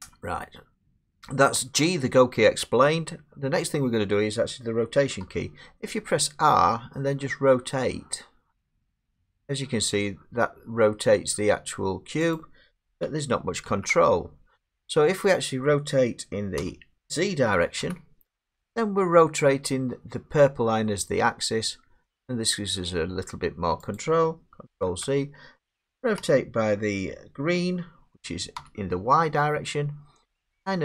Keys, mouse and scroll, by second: 0.8 middle click, 5.2 r, 12.4 click, 13.7 ctrl+z, 16.6 r, 17.8 z, 18.1 click, 24.0 click, 24.9 ctrl+z, 26.2 r, 28.6 y.